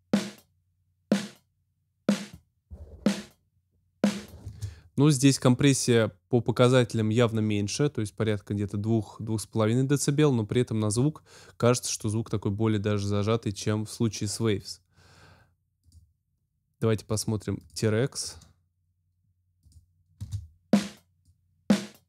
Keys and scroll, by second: 4.4 space, 20.1 space.